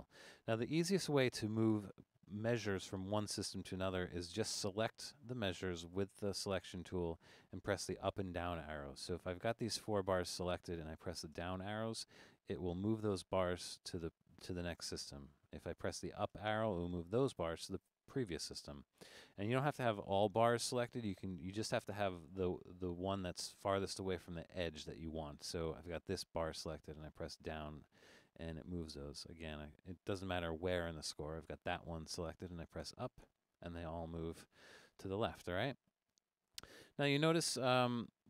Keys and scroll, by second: 11.4 Down, 16.3 Up, 26.7 Down, 32.8 Up, 36.5 Down.